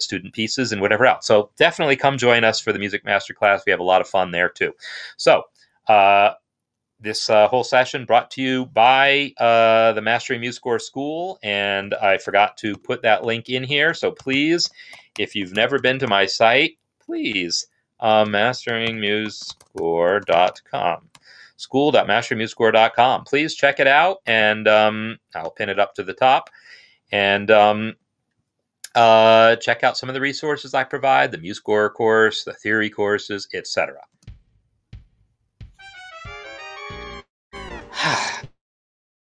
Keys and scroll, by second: 34.1 space.